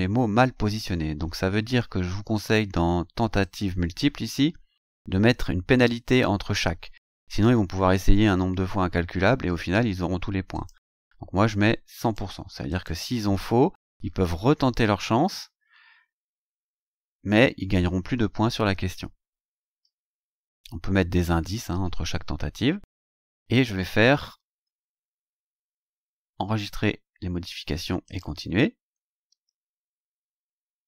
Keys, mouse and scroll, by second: 1.4-2.1 scroll down 4, 3.4 click, 4.4 scroll down 1, 10.5 click, 12.0 click, 12.7 click, 19.4-19.7 scroll down 1, 20.1-20.4 scroll down 1, 21.3-21.6 scroll up 2, 22.9 scroll down 2, 28.1 click.